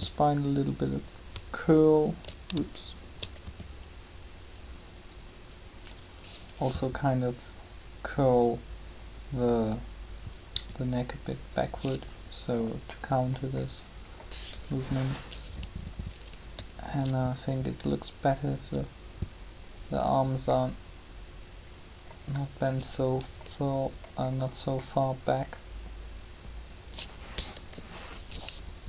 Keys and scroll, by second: 3.4 shift+r, 10.4 r, 14.5 3, 27.4 7.